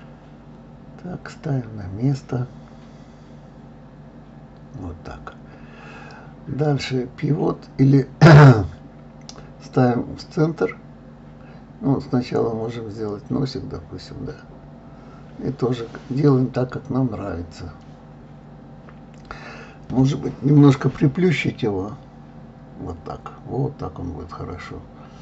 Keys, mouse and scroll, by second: 0.1 g, 1.4 middle click, 2.0 KP_3, 2.3 click, 3.6 g, 4.5-5.5 middle drag, 6.5 click, 7.6 g, 9.6 shift+d, 10.4 middle click, 10.9 click, 12.1 KP_1, 13.1 g, 15.8-16.8 middle drag, 17.1 click, 18.1 s, 18.9-19.9 middle drag, 20.3 click, 22.7 middle click, 23.7 click, 24.5-25.2 drag.